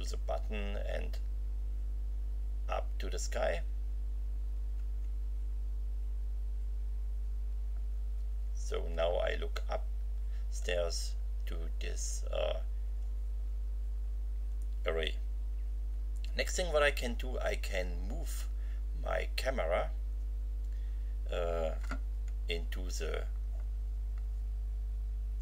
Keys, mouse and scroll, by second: 0.1 Down, 5.0 Left.